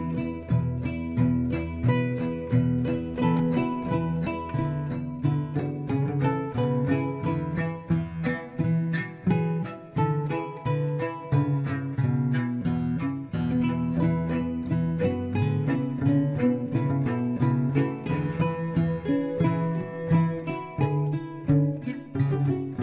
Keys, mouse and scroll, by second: 0.9-2.9 scroll up 4, 2.9-5.5 drag, 5.5 Tab, 6.0-6.3 scroll down 1, 6.3-8.6 middle drag, 9.2 click, 9.5 scroll down 1, 9.7-11.2 middle drag, 11.2 click, 11.5 scroll down 2, 11.7-12.5 middle drag, 12.5 scroll up 1, 12.8-13.1 scroll down 2, 13.1 drag, 13.4 drag, 14.5 s, 16.5 scroll up 2, 16.7 shift+middle click, 17.1 KP_1, 18.4 shift+z, 18.6 scroll up 1, 18.8-20.5 shift+middle drag, 20.5 Tab, 21.2 g.